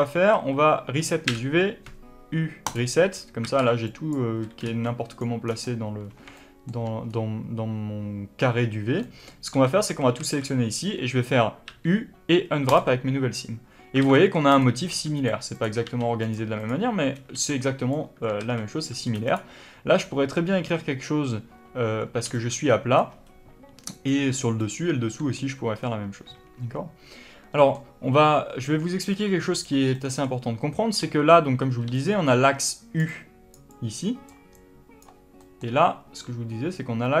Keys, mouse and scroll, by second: 0.2 a, 3.4 alt+a, 3.4 middle click, 3.8 click, 4.6 b, 5.4-5.9 scroll down 1, 5.9-6.3 scroll up 1, 6.3-14.4 shift+middle drag, 7.0-8.2 scroll up 1, 9.4 alt+a, 13.6 scroll up 1, 13.9 alt+a, 14.4 click, 14.8 g, 15.4 click, 15.8 g, 16.5 click, 17.3 b, 23.8 click, 24.5 click, 25.7 scroll down 1, 26.2-27.5 scroll up 1, 27.5-29.1 middle drag, 29.1 click, 29.8-31.9 middle drag, 31.7 d, 31.9-35.3 drag, 32.9-35.5 typing, 35.3 middle click, 36.1-37.2 drag.